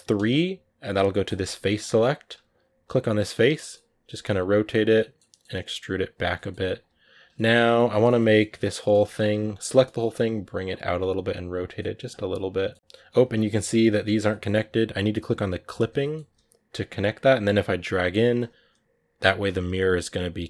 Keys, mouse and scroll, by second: 1.0-2.8 drag, 2.8 right click, 3.0 shift+middle click, 3.8 r, 4.3 g, 4.7 middle click, 5.4 e, 6.1 middle click, 6.4 r, 6.6 g, 7.1-8.3 middle drag, 8.3 g, 8.8 a, 9.0 a, 9.5 middle click, 10.0 g, 10.8 r, 11.6-12.7 middle drag, 12.7 g, 12.9 g, 13.3 middle click, 13.5 scroll up 2, 14.1-15.5 middle drag, 15.5 click, 15.8 middle click, 16.1 g, 17.9 g, 19.5-20.4 drag.